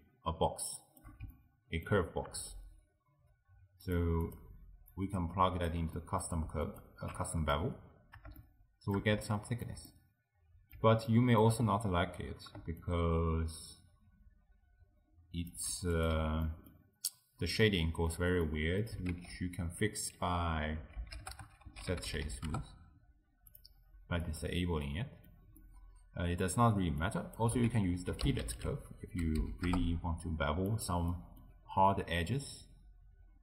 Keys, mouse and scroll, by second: 3.9 click, 5.0 click, 6.0-6.8 middle drag, 6.8 alt+shift+click, 7.3 middle click, 8.1-8.4 scroll up 2, 8.4-12.9 shift+middle drag, 12.9-15.9 shift+drag, 16.0 click, 16.4 x, 16.5 middle click, 17.2-17.6 scroll down 1, 17.6-19.1 middle drag, 19.1 ctrl+a, 24.4 click, 24.9-27.1 middle drag, 27.1 click, 27.7 ctrl+a, 28.6 l, 31.1 middle click, 31.7-32.5 scroll up 3, 32.5-33.4 scroll down 1.